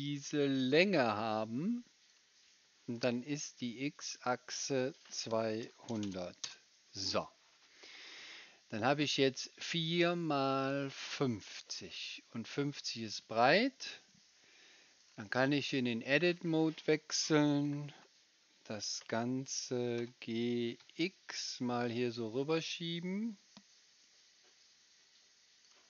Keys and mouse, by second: 2.1-3.8 middle drag, 3.8 right click, 4.2-9.0 middle drag, 6.0 KP_0, 15.7-20.0 drag, 15.7-20.0 right drag, 17.5 g, 20.0 g, 23.0-25.6 drag, 23.0-25.6 right drag.